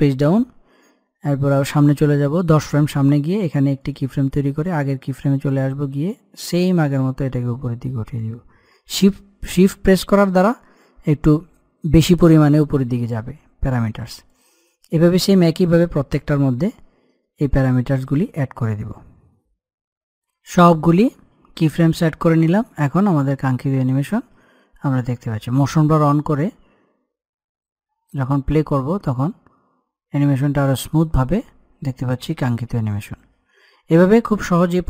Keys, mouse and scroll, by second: 3.5-14.0 drag, 14.0-16.5 drag, 16.5-19.3 middle drag, 22.7 click, 25.7 click.